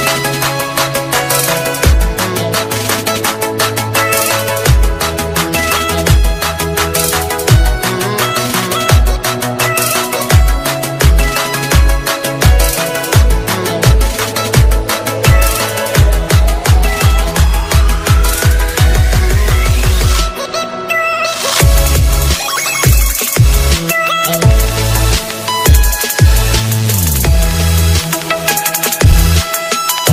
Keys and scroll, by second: 9.1 alt+space, 12.9 ctrl+space, 13.9 alt+space, 14.8 ctrl+space, 15.5 alt+space, 18.8 ctrl+space.